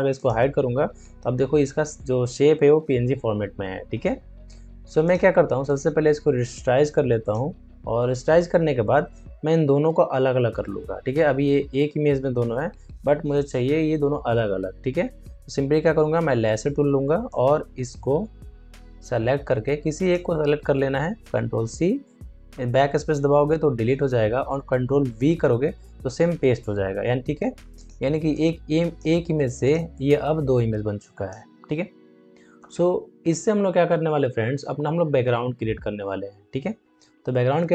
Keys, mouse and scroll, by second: 0.1 click, 5.6 right click, 7.1 click, 16.2 click, 17.2-21.4 drag, 21.4 ctrl+c, 22.4 BackSpace, 23.6 ctrl+d, 24.9 ctrl+v, 27.7-29.5 drag, 30.2-33.7 drag.